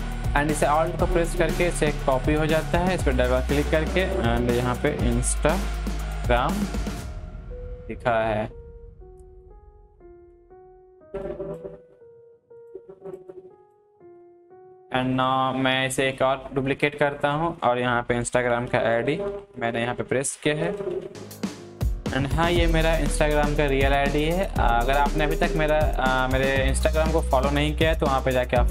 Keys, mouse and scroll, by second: 0.1-2.5 alt+drag, 4.2-6.4 typing, 7.4-10.0 drag, 10.0 Up, 10.5 Left, 11.2-14.3 drag, 14.3 Left, 15.2 click, 18.1-22.6 typing, 24.1-28.7 drag.